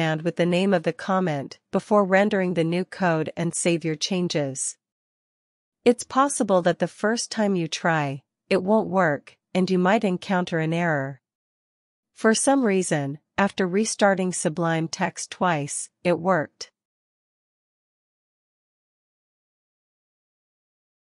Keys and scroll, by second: 0.9-5.1 typing, 8.9 super+r, 10.9-14.6 typing, 15.5 super+c, 15.8 BackSpace, 15.9 BackSpace, 16.6 Return, 19.1 super+r.